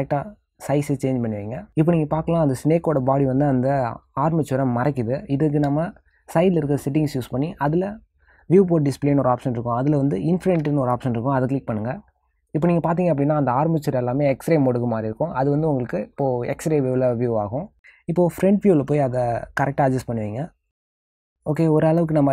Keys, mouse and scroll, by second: 0.1 g, 3.0 s, 6.7 middle click, 7.6 click, 8.9 click, 11.5 click, 13.5 middle click, 17.8 shift+middle click.